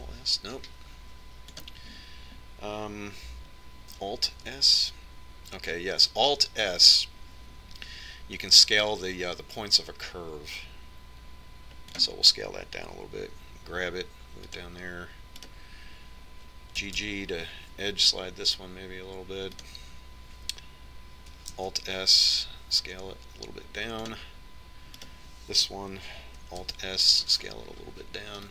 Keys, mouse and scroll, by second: 3.4 ctrl+s, 3.4 click, 6.1 alt+s, 15.1 g, 17.2-18.7 right drag, 18.7 g, 23.4 alt+s, 27.0-28.5 right drag.